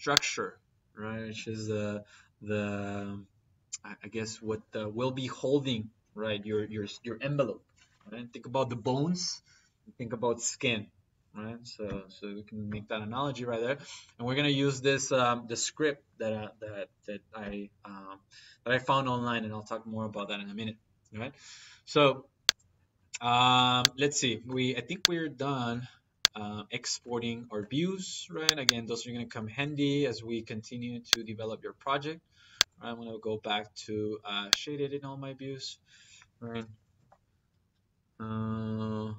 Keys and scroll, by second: 36.2-37.3 typing.